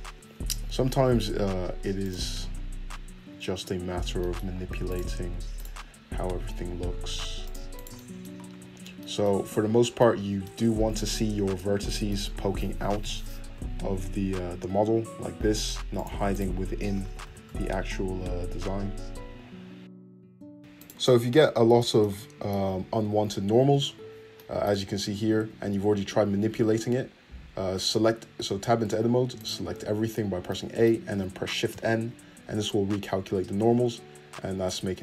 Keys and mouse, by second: 0.5 g, 2.2 Tab, 2.6 `, 3.5 `, 3.8 middle click, 3.9 Tab, 4.9 click, 5.5 click, 6.2 g, 7.7 click, 7.9-13.8 drag, 8.5 `, 11.0 `, 12.8 g, 13.8-16.3 shift+middle drag, 16.3 click, 16.7-19.8 middle drag, 17.0 g, 19.4 a, 19.4 shift+n, 19.8-20.8 ctrl+drag, 20.0 ctrl+z, 20.5 Tab, 20.8-25.5 middle drag, 25.5 Tab, 26.4 Tab, 27.9 Tab, 28.4 Tab, 28.8 Tab, 29.3 click, 29.7 a, 30.4 middle click, 31.7 shift+n, 32.4 Tab.